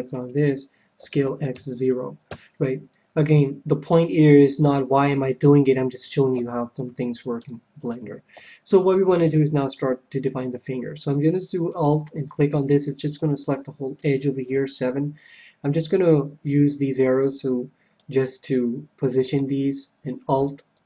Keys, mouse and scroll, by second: 0.1-2.1 right drag, 1.0 s, 4.6-6.3 middle drag, 6.3 KP_3, 7.3 KP_1, 8.3 a, 9.2 KP_7, 11.6-13.4 right drag, 12.9-14.4 middle drag, 14.4 KP_7, 16.1-17.8 drag, 19.2-20.8 right drag, 20.7-20.8 drag.